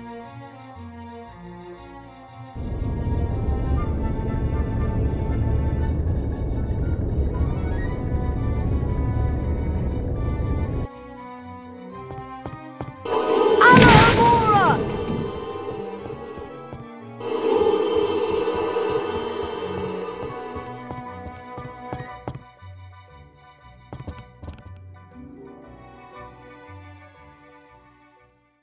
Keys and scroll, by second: 3.0 F4, 12.1-12.8 typing, 14.9-24.6 typing, 25.3 Escape.